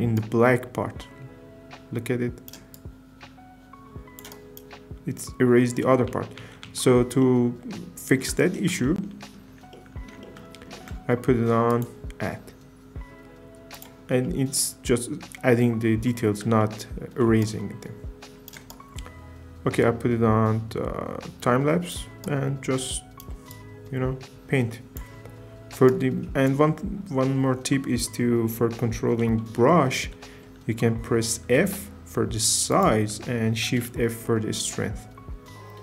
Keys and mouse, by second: 6.2 ctrl+z, 6.5 ctrl+z, 6.8 ctrl+z, 11.8-13.8 drag, 16.6 shift+middle click, 17.4-18.6 right drag, 31.4 f, 32.7 click, 33.7 shift+f.